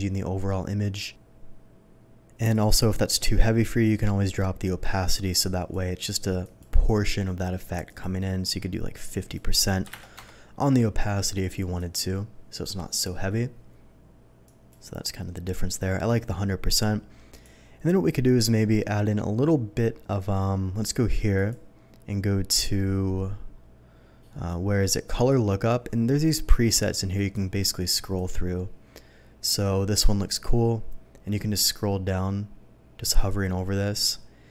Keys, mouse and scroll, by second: 2.5 click, 4.3-5.7 drag, 6.4 click, 6.8 click, 7.6 click, 7.8 click, 9.1 click, 9.9 KP_0, 10.1 KP_5, 10.3 Return, 11.4 click, 11.8 click, 14.4 click, 17.3 click, 21.3 click, 25.1 click, 27.1 click, 28.1 click, 31.2-34.5 scroll down 1.